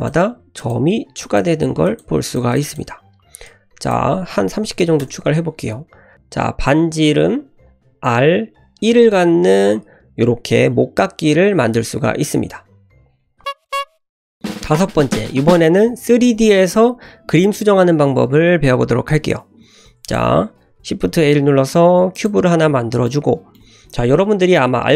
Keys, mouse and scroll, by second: 0.5 click, 1.2 click, 1.8 click, 2.2 click, 3.4-5.5 drag, 6.1-7.2 drag, 7.6 click, 7.9 click, 8.6 click, 19.5-20.0 scroll down 1, 20.0 click, 21.0 shift+a, 23.0-23.5 middle drag.